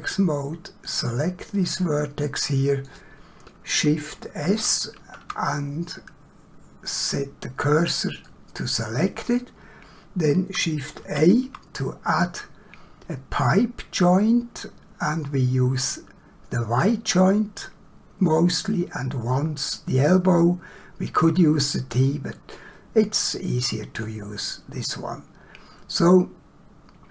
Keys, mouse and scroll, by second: 0.8 click, 2.2 middle click, 4.6 shift+s, 6.9 click, 8.3 middle click, 11.0 shift+a.